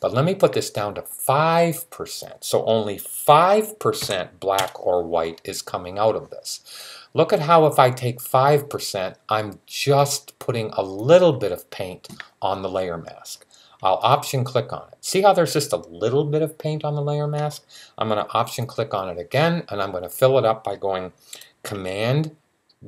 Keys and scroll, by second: 3.7 5.